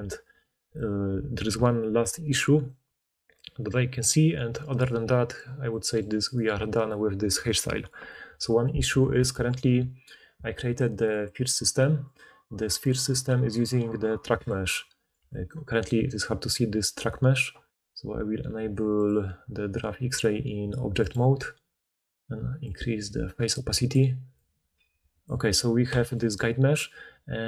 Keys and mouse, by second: 1.3-6.3 middle drag, 6.3-11.2 drag, 9.3 alt+a, 11.2 middle click, 12.0 drag, 12.3-12.8 middle drag, 12.8 click, 12.9-13.5 middle drag, 13.5 click, 13.6-14.3 middle drag, 14.1-14.9 d, 14.3-15.2 drag, 15.1 d, 15.8-16.9 drag, 17.0-27.4 drag, 26.6-27.4 d.